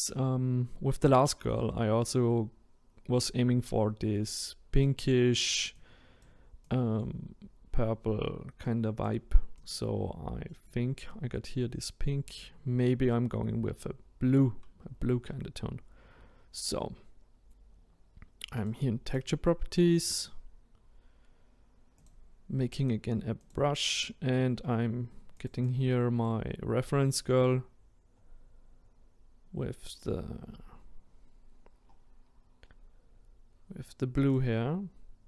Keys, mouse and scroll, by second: 5.9 click, 10.5-19.8 middle drag, 19.8 click, 22.0-35.2 drag.